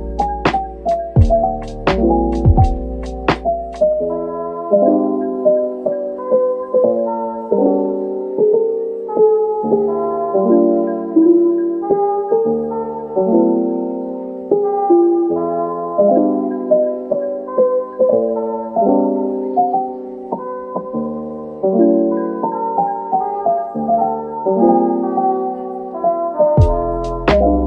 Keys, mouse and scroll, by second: 0.0-0.5 typing, 1.6 scroll down 1, 1.9 middle click, 3.0 Tab, 3.4-3.8 scroll down 1, 3.8 middle click, 6.3-6.8 scroll down 1, 6.8 middle click, 12.2 Tab, 14.8 middle click, 17.5 3, 19.1 middle click, 22.6 middle click, 27.0 ctrl+click.